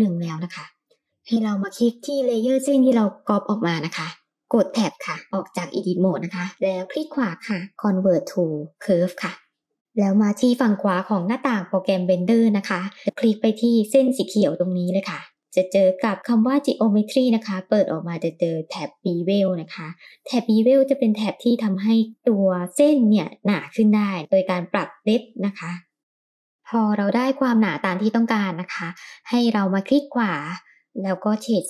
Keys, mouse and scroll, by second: 3.2 click, 4.7 Tab, 6.8-9.6 drag, 6.8 right click, 13.4 click, 14.3-15.0 scroll down 2, 15.7 click, 15.7 scroll down 1, 16.8-17.3 scroll down 2, 26.5 click, 26.8 click, 26.9 click, 27.2 click, 28.3 click, 29.3-31.6 right drag.